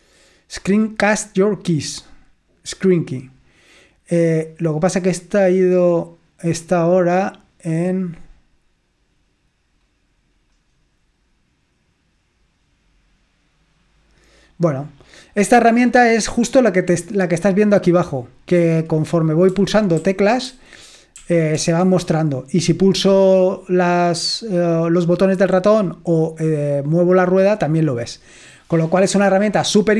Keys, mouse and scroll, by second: 5.9 scroll, 6.5-7.1 scroll up 2, 7.1-8.1 scroll, 8.1 scroll, 13.9-14.8 scroll down 2, 14.8-15.4 scroll down 1, 15.8-16.3 scroll up 2, 16.3-17.6 scroll up 1, 19.4-21.6 typing, 23.6-25.7 drag.